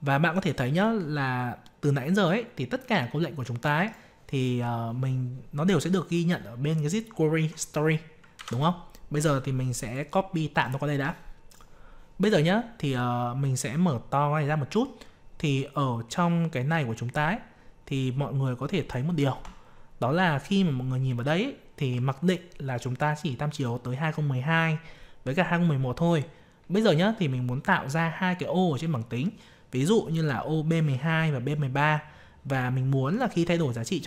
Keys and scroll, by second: 8.3 ctrl+c.